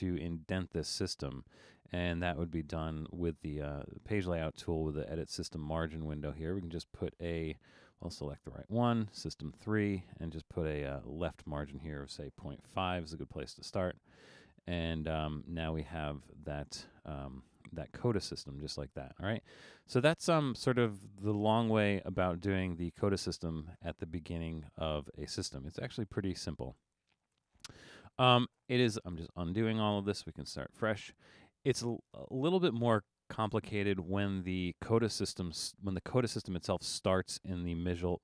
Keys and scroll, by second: 12.0-13.0 typing, 25.5 super+z, 26.0 super+z, 26.8 super+z, 27.3 super+z, 28.0 super+z, 28.6 super+z, 29.2 super+z, 29.9 super+z, 30.8 super+z.